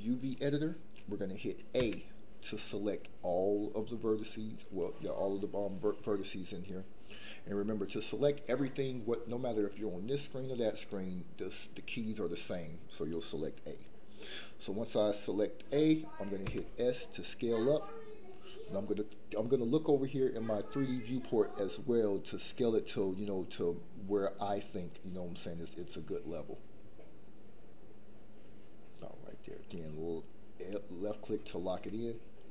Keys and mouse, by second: 1.8 a, 16.4 s, 30.5 click.